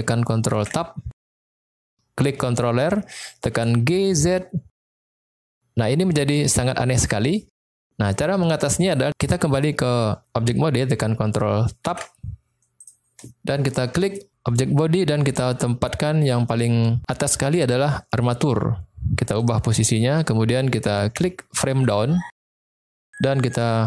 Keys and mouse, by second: 0.6 ctrl+Tab, 1.0 click, 3.5 g, 4.0 z, 7.2 click, 11.8 ctrl+Tab, 14.0 click, 17.2-19.5 drag, 21.4 click.